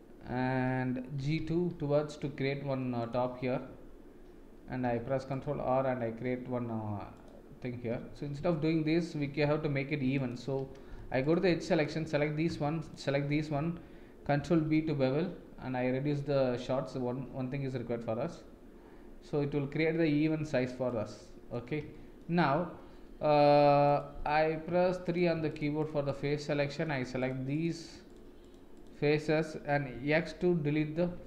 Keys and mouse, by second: 1.2 g, 4.8 ctrl+r, 8.1 ctrl+z, 8.4 ctrl+z, 9.7 ctrl+z, 10.2 alt+click, 11.0 2, 11.2 click, 12.8 alt+shift+click, 14.6 ctrl+b, 21.2 middle click, 21.9 shift+middle click, 24.7 3, 25.5 shift+click, 25.8 shift+click, 26.6 shift+middle drag, 27.2 shift+click, 27.5 shift+click, 28.1 shift+click, 28.4 shift+click, 29.9 x.